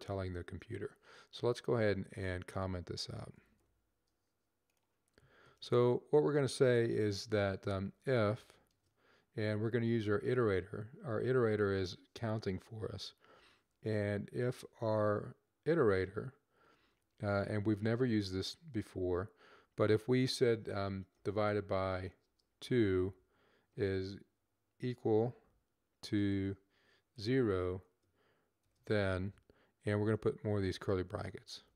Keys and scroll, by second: 3.2 /, 7.3-8.5 typing, 13.2-14.2 typing, 21.0 /, 22.2 /, 23.7 typing, 24.8 typing, 27.1 typing, 28.4 typing, 30.0-30.7 typing.